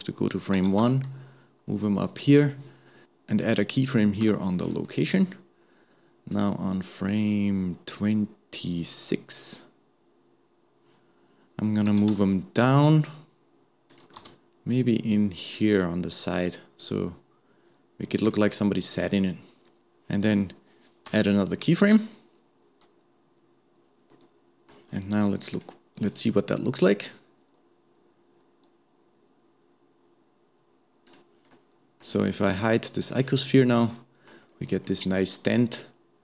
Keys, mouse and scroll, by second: 0.5 g, 6.3 click, 9.5-10.8 drag, 21.9-25.0 middle drag, 25.5 click, 26.1-29.3 drag, 31.2 click, 31.5-33.0 middle drag, 33.0 click, 33.4-34.5 middle drag, 34.5-34.9 scroll up 1, 34.9-36.2 middle drag.